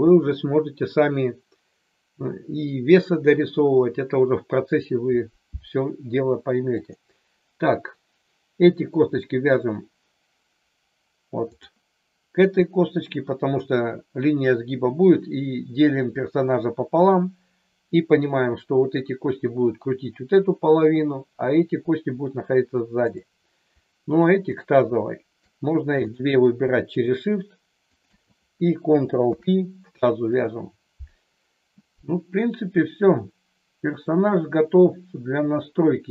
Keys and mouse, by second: 6.7 click, 11.5 click, 23.1 click, 24.5 shift+click, 26.9 shift+click, 27.9 shift+click, 29.2 ctrl+p, 34.0-36.1 middle drag.